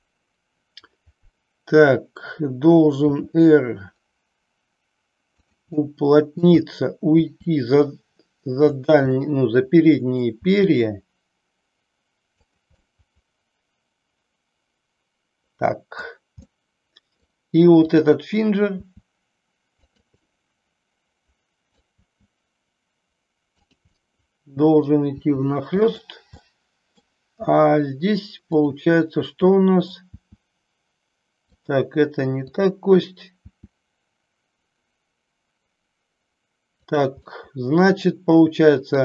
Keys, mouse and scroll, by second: 3.1 r, 5.4 click, 5.7 middle click, 7.2 r, 9.0-10.0 middle drag, 10.3 r, 12.8-16.0 middle drag, 16.4 middle click, 17.8 click, 18.8 r, 19.8 click, 20.0-21.7 middle drag, 22.0 r, 23.9 middle click, 25.2 r, 25.9 click, 26.3 middle click, 28.4 click, 29.4 middle click, 30.0 r, 31.7 click, 32.4 click, 33.4 r, 37.2-38.8 middle drag.